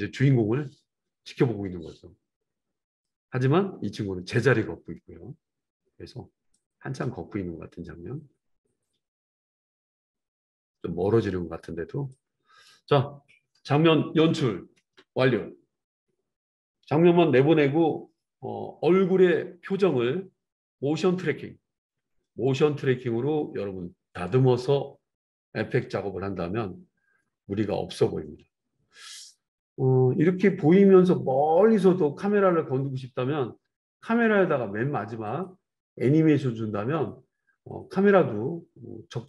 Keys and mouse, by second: 15.1 ctrl+s, 35.5-39.2 middle drag.